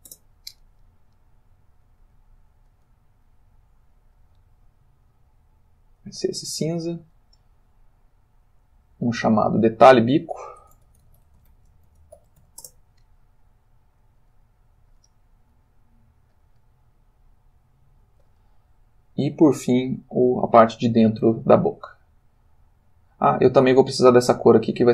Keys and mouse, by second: 0.1 shift+Return, 1.8 click, 2.6 click, 3.2 click, 4.2 click, 5.7 click, 8.6 click, 9.3 click, 9.9 click, 10.7-12.4 typing, 12.9 shift+Return, 14.2 click, 14.9 click, 15.4 click, 16.3 click, 17.7 click.